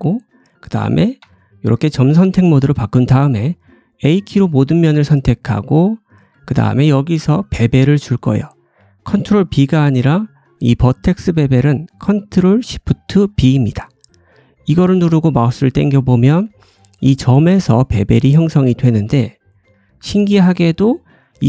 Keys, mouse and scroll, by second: 1.1 1, 3.3 middle click, 3.9 a, 4.8 middle click, 14.7 ctrl+shift+b, 17.7-21.4 middle drag.